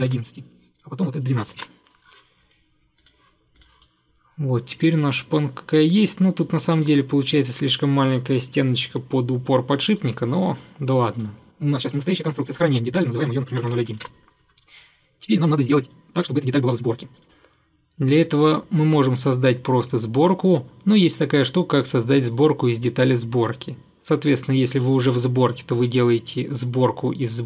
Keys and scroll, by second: 0.0 1, 0.1 Return, 1.3-2.0 typing, 13.4-14.3 typing.